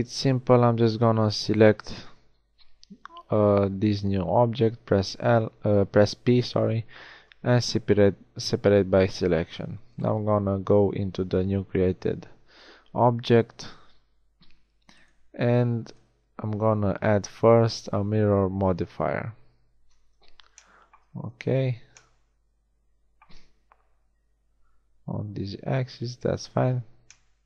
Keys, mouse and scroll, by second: 4.5 p, 9.3 Tab, 9.9-12.5 right drag, 13.3 Tab, 14.9-16.8 right drag, 25.3 g.